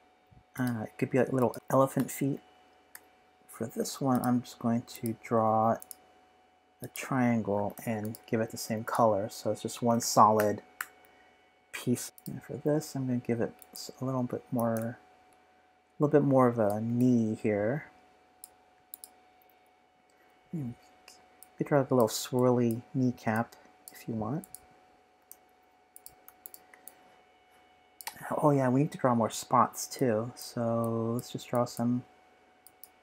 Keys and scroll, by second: 10.0 super+-, 10.3 super+-, 10.8 super+-, 12.0 space, 12.0 s, 20.3 p, 24.9-25.7 typing.